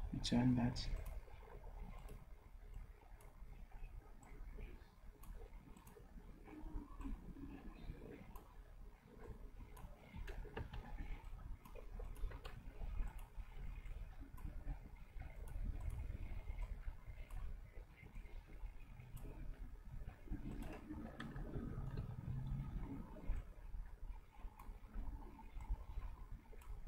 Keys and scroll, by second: 10.6 ctrl+z, 21.0 v, 22.0 d.